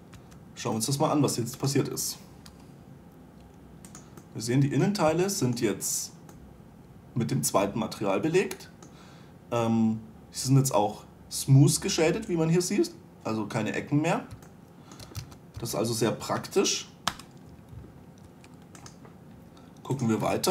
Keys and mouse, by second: 0.7 2, 3.1 g, 4.8-14.7 drag, 15.8 a, 16.1 a, 16.9 Delete, 18.9 1.